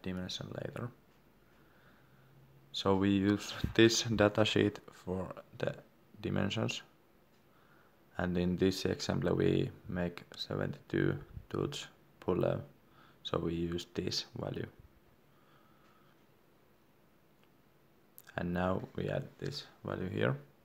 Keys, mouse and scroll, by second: 1.7 click, 18.9 d, 19.3 click, 19.8 1.